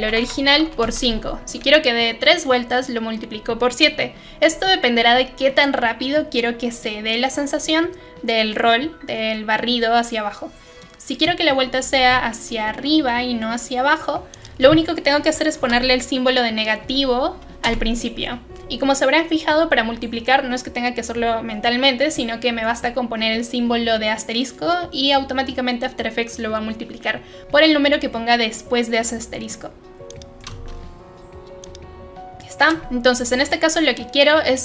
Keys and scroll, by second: 0.0-1.3 typing, 10.7 Return, 15.5 BackSpace, 16.8 -, 17.6 Return.